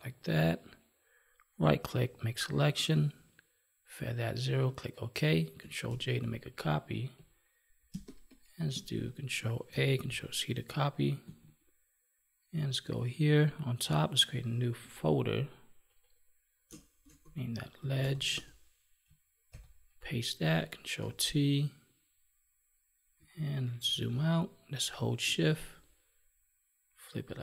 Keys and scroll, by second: 5.8 ctrl+j, 7.8 space, 9.6 ctrl+a, 11.1 ctrl+Tab, 19.4 ctrl+v, 20.9 ctrl+t, 23.6 ctrl+-.